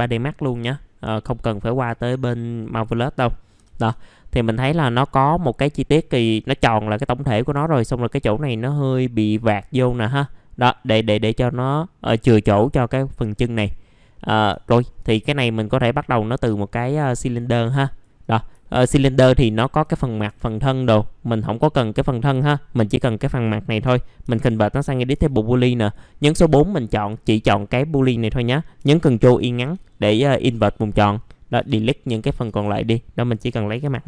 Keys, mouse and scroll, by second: 1.0 right click, 1.9 click, 2.5 middle click, 3.6 typing, 4.3 middle click, 4.7-7.4 scroll up 1, 10.2 middle click, 14.6 ctrl+right click, 15.3-17.6 drag, 18.2 right click, 18.6 alt+middle click, 19.0 scroll down 1, 19.4 alt+middle click, 20.2 F4, 24.2 ctrl+g, 25.8 click, 31.6 Delete, 33.1-33.8 typing.